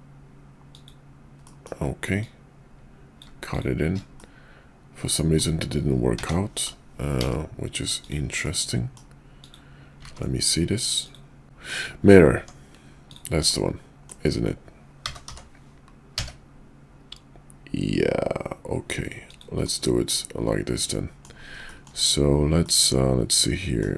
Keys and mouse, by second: 1.5 middle click, 4.2-5.4 middle drag, 6.2 g, 8.4 middle click, 9.5 click, 10.0 ctrl+`, 11.4 middle click, 11.4 KP_5, 12.4 Tab, 13.4 middle click, 15.0 g, 19.6-21.2 middle drag, 21.7 shift+middle click, 22.5-23.8 middle drag.